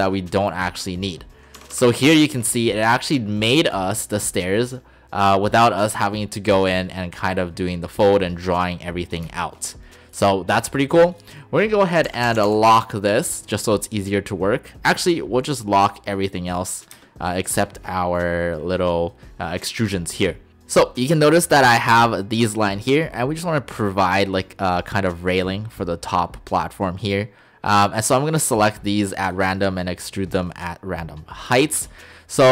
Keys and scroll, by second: 1.6 Escape, 1.8 Escape, 12.1-12.5 typing, 12.7 Return, 17.0 space.